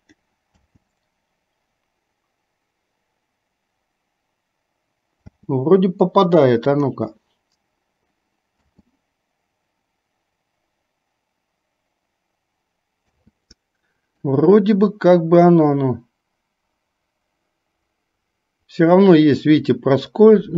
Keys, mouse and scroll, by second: 0.0 click, 0.6 space, 5.4 space, 6.7 click, 8.6 space, 14.2-20.5 drag.